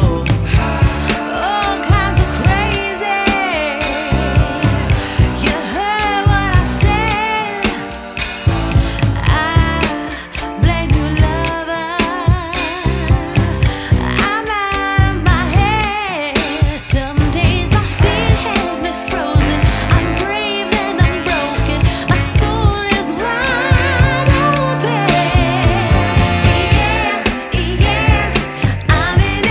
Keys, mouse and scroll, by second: 0.9-1.3 scroll up 2, 1.6-1.9 scroll down 1, 2.6 scroll down 1, 3.8 scroll up 1, 6.1 scroll down 1, 7.8 F10, 10.6 click, 16.0 click.